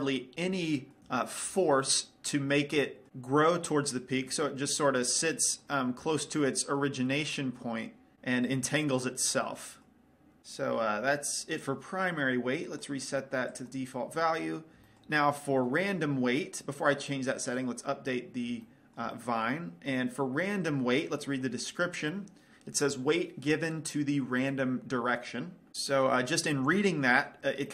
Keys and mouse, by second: 0.0 middle click, 2.3 middle click, 4.9-8.1 middle drag, 9.2-10.4 middle drag, 11.0-12.7 middle drag, 13.1-14.9 right drag, 14.9-18.4 middle drag, 18.4-19.6 drag, 19.6-27.7 middle drag.